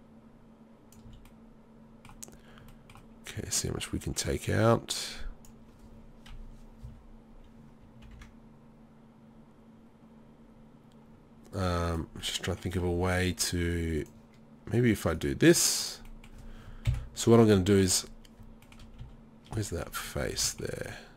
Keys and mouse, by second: 1.1 z, 3.4 middle click, 6.3 KP_3, 6.8 z, 8.0 ctrl+r, 14.0-15.2 middle drag, 16.1 middle click, 16.9 KP_7, 17.7 middle click, 19.0 z, 20.3 z.